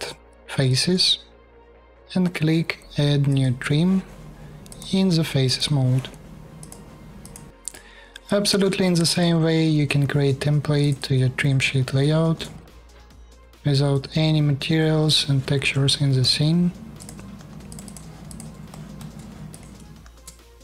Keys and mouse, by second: 0.0 shift+click, 0.4 shift+click, 0.6 click, 1.2 click, 1.6 typing, 2.3-5.2 drag, 2.3-5.2 middle drag, 2.3-5.2 right drag, 6.3 click, 6.3 middle click, 6.3 right click, 6.9 click, 6.9 middle click, 6.9 right click, 7.5 middle click, 8.5 shift+KP_4, 9.1-11.0 middle drag, 9.7 shift+KP_4, 12.0 shift+KP_4, 13.1 shift+KP_4, 15.8 BackSpace, 17.0 shift+KP_4, 19.7 shift+KP_4.